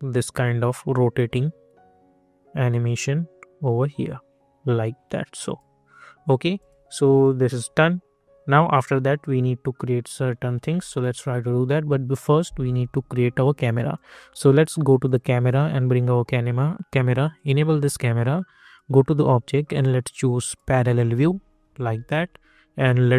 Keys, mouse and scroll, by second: 5.4 click, 8.1 scroll up 1, 8.6-10.2 alt+drag, 10.2-11.1 scroll down 1, 15.1 click, 17.3 click, 21.2 scroll up 1, 22.1 alt+click.